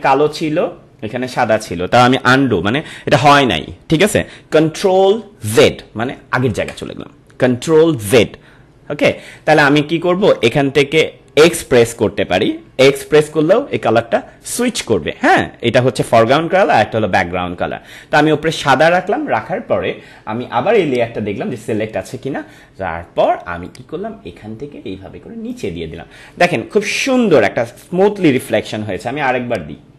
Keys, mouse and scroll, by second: 6.4 ctrl+z, 13.5 x, 20.8 click, 23.6-27.9 drag, 29.6-29.9 drag.